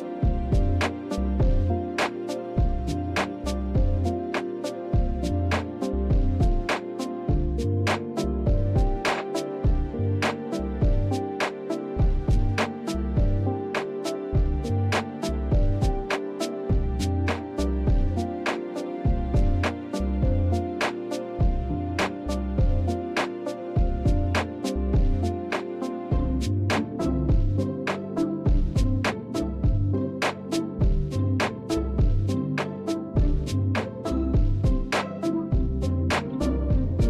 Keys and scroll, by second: 0.0-7.8 typing, 8.9-18.4 typing, 24.9 Right.